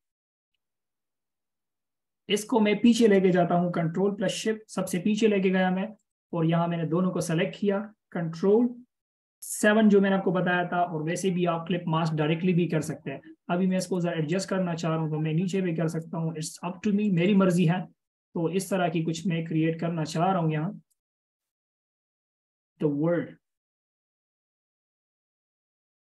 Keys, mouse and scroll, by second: 6.2 ctrl+shift+[, 6.8 double click, 14.2 double click.